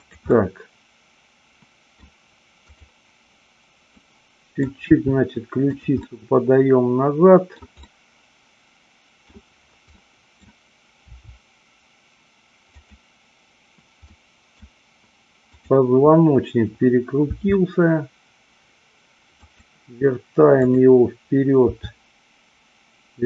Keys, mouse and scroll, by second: 0.1 click, 0.3-1.9 middle drag, 3.9 middle click, 4.8 r, 5.7 click, 6.1-7.7 middle drag, 7.8-9.3 middle drag, 9.9 middle click, 10.9 r, 12.7 click, 14.1 middle click, 15.6-16.8 drag, 17.2 r, 19.5 click, 20.6-21.8 drag, 21.9 r.